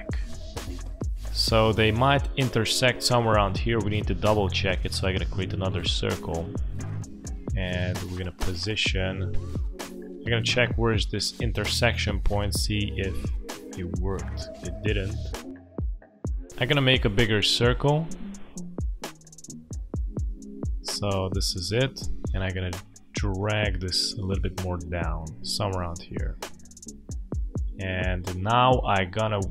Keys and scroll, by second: 26.1 space.